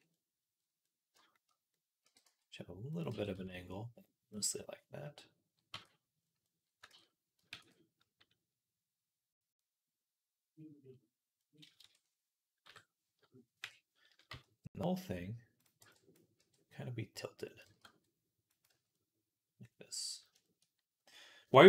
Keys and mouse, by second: 0.1 right click, 0.4-4.4 drag, 1.9 r, 2.9 g, 4.4 middle click, 4.9 click, 5.2 middle click, 5.5 Tab, 7.4 ctrl+s, 11.3-14.7 middle drag, 11.6 Tab, 12.5 KP_7, 13.4 KP_1, 14.1 z, 14.7-21.6 drag, 15.6 b, 16.2 r, 17.5 g, 18.5 z.